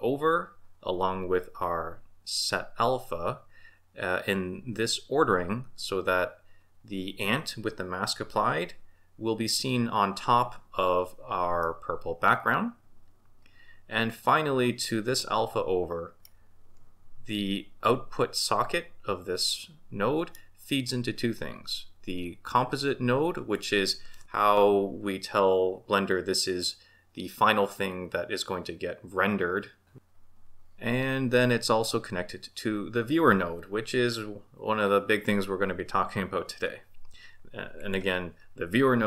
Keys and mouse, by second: 11.6-16.3 middle drag, 19.5-20.4 middle drag, 37.8 click.